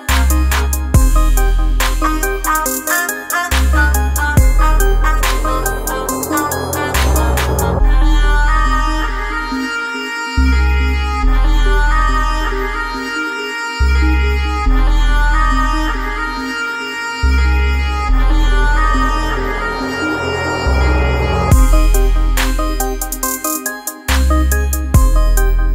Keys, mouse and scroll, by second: 4.0-12.3 alt+drag, 12.3-16.2 drag, 16.2 Right, 18.1 click, 25.6-25.7 drag.